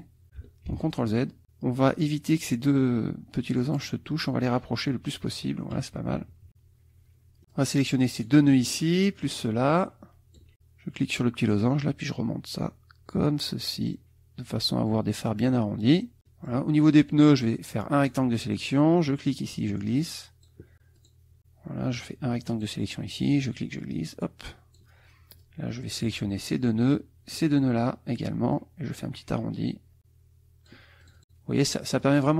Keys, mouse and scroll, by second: 0.7 ctrl+z, 2.7-5.0 drag, 6.0 KP_Subtract, 7.5 click, 9.2-10.5 shift+drag, 11.5-15.4 drag, 15.9 middle click, 16.2 middle click, 16.3 click, 16.9-18.3 drag, 19.1-20.6 drag, 21.0 click, 22.0 click, 23.4-25.0 drag, 25.4 click, 26.8 shift+click, 28.5-30.9 drag, 31.0 click, 31.7 click.